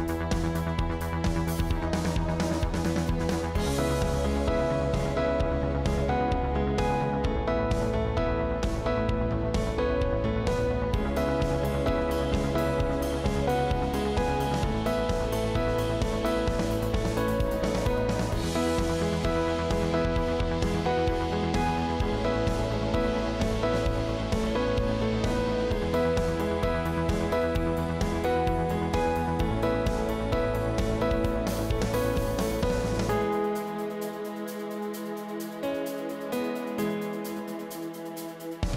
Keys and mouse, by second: 0.6 ctrl+click, 4.7 g, 7.9 click, 8.2 g, 13.6 click, 23.1 ctrl+z, 23.5 click, 24.7 g, 28.0 g, 30.5 shift+click.